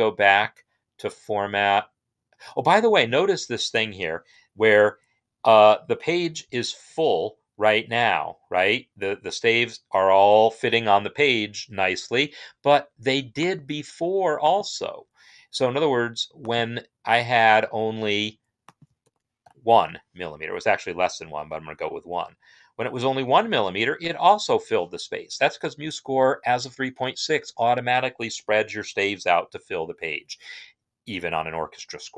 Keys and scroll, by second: 18.8 ctrl+a, 19.2 1, 21.8 Return, 21.9 Return.